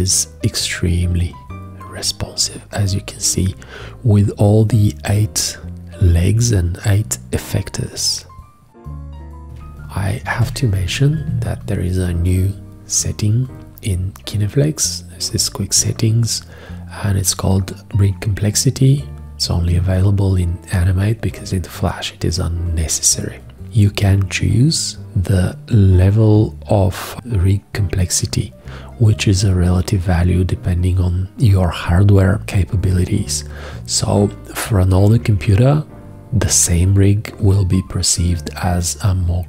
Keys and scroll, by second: 10.3 shift+g.